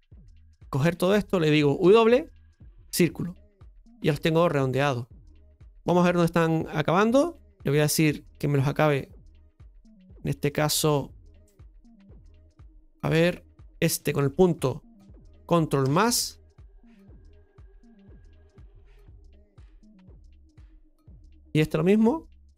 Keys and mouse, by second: 0.6 shift+click, 5.8 KP_Divide, 8.3-9.8 drag, 9.8-11.9 middle drag, 11.9 KP_Divide, 13.8 right click, 15.8 ctrl+KP_Add, 17.9 ctrl+KP_Add, 17.9 KP_Divide, 19.7-22.5 drag.